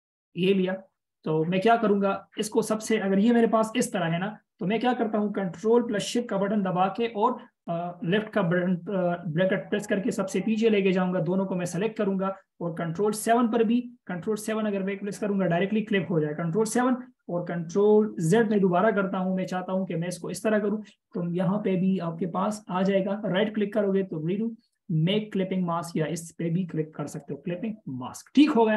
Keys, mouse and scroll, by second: 4.0 ctrl+shift+], 7.2 ctrl+shift+[, 14.8 ctrl+7, 18.7 ctrl+z, 19.8 right click.